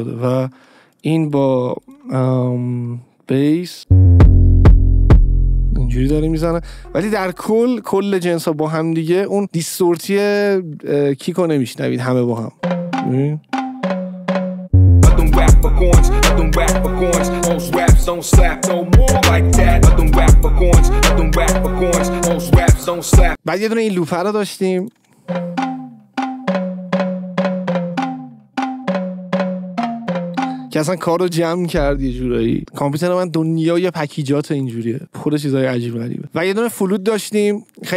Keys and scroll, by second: 3.8 space, 6.4 space, 12.5 space, 25.1 space, 30.8 space.